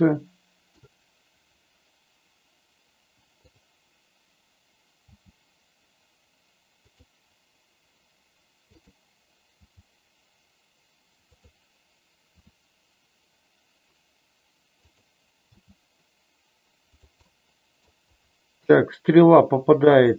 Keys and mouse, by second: 3.5 click, 5.0 g, 6.8 click, 8.8 click, 9.4 g, 11.3 click, 12.3 r, 15.5 g, 16.9 click, 17.2 middle click, 19.2 r.